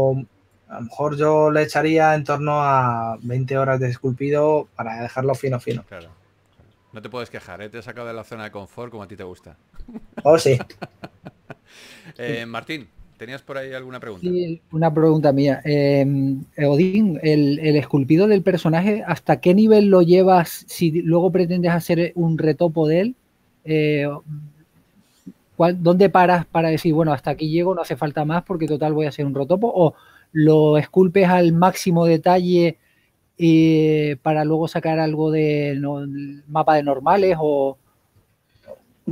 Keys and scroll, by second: 7.4 e, 14.7-16.0 typing, 16.2 super+a, 18.2 w, 21.3-22.5 typing, 23.9 e, 25.3-26.0 typing, 27.6 typing, 31.2 shift+f, 33.5-34.3 typing.